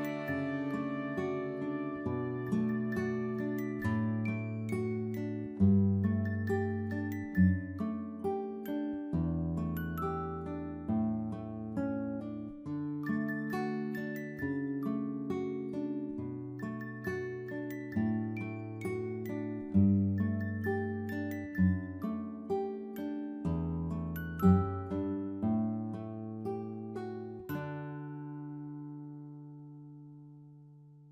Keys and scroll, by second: 18.2-18.9 typing.